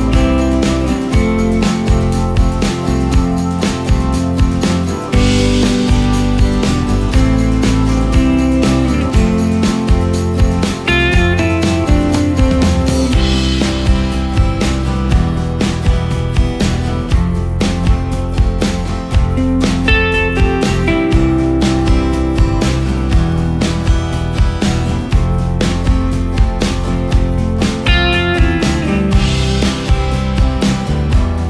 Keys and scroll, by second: 0.2 ctrl+space, 2.1 alt+space, 3.9 ctrl+space, 15.8 ctrl+space, 16.9 ctrl+space, 23.6 shift+Down, 24.3 shift+Up.